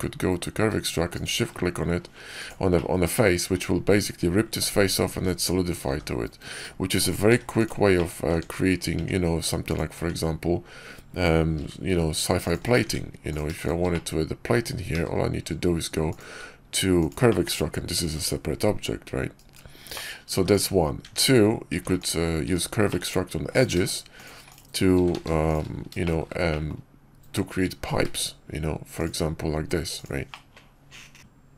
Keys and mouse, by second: 2.6-3.4 middle drag, 5.7 g, 7.2 x, 7.8 click, 8.2 Tab, 8.9 Tab, 9.6 click, 9.8 Tab, 11.5 ctrl+r, 12.7 Tab, 13.2 click, 13.8 click, 14.8 q, 17.2 drag, 18.0 g, 19.8 click, 20.2 x, 20.9 Tab, 21.6 Tab, 21.9-22.3 drag, 22.8 Tab, 22.8 click, 23.4 click, 25.1 ctrl+z, 25.9 shift+middle click, 26.4 middle click, 27.9 q, 30.2-31.2 drag.